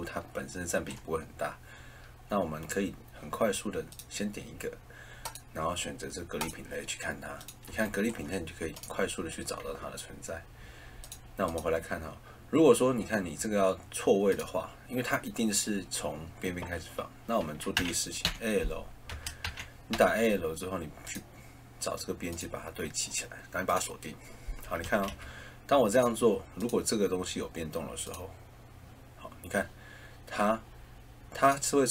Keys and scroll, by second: 17.7 a, 18.2 l, 19.4 a, 19.9 l, 24.8 Escape.